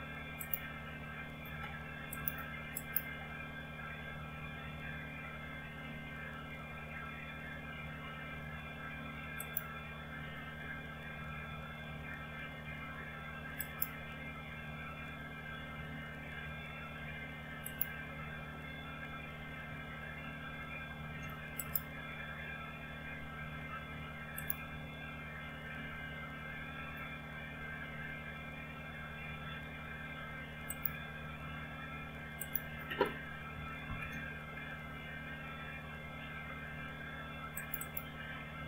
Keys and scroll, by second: 34.1 ctrl+h.